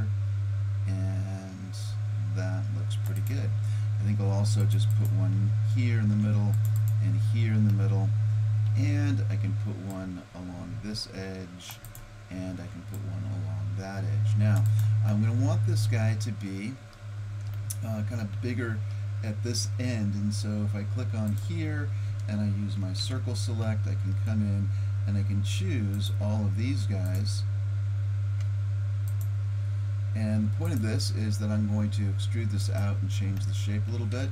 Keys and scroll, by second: 4.0 ctrl+r, 6.1 ctrl+r, 9.5 ctrl+r, 12.5 ctrl+r, 23.0 c.